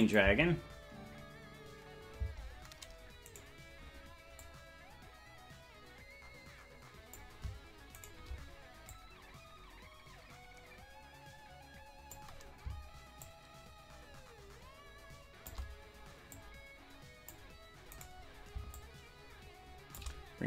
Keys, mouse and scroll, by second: 0.0 click, 0.2 space, 2.2 space, 3.4-4.4 right drag, 4.4-7.2 drag, 8.0 shift+right click, 8.9-12.2 drag, 13.2-15.5 shift+drag, 16.3-17.3 drag, 18.1 right click, 18.7-20.0 shift+drag.